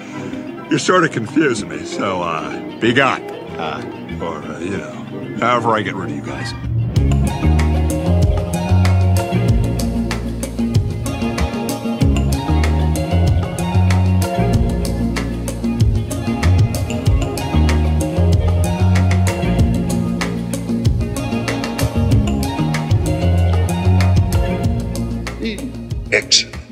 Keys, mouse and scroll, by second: 0.3 Tab, 0.9-3.8 drag, 4.1 Tab, 4.8 click, 5.3 middle click, 6.6 click, 7.1 shift+click, 7.6 g, 7.9 x, 10.3 click, 10.3 typing, 12.1 g, 12.3 x, 13.6 click, 13.6 typing, 14.8 click, 15.3 shift+click, 16.3 shift+click, 17.2 g, 17.4 x, 18.6 click, 18.9 click, 19.4 Tab, 20.4-24.1 drag, 24.6 Tab, 24.8 click, 26.6 g.